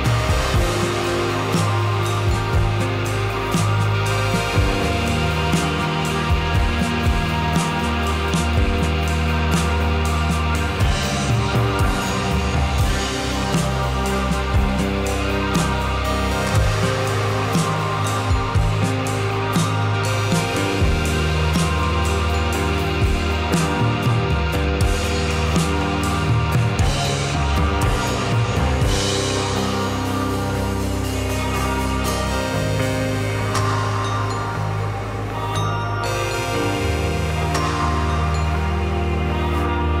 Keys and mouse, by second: 0.8 click, 1.0-2.0 drag, 4.4-5.4 drag, 6.6 Tab, 8.1 l, 8.8 l, 10.1 click, 12.5 click, 13.5 click, 15.1 ctrl+z, 16.1 click, 16.4 click, 17.3 click, 18.1 click, 18.7 ctrl+z, 19.7 ctrl+z, 20.6-21.3 drag, 25.3 l, 26.2-26.7 drag, 27.1 click, 28.4-29.5 drag, 32.5-34.0 drag, 34.0 right click, 35.1 right click, 36.1 right click, 37.6-38.0 right drag, 38.9-40.0 middle drag.